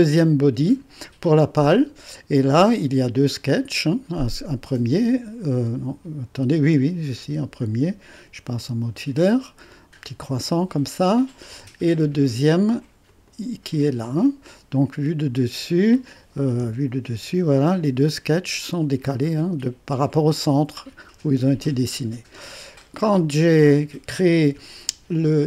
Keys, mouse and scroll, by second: 2.6 click, 3.8 click, 4.1 click, 4.4 click, 8.1 2, 11.5 click, 13.1-15.3 drag, 16.3-17.2 typing, 21.6-22.6 drag.